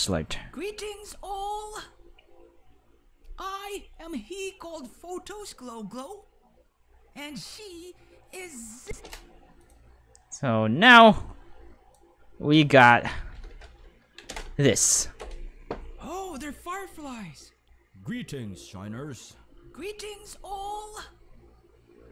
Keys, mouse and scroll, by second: 8.8 space, 8.9 5, 9.6 click, 9.6 right click, 11.0 click, 14.2 space.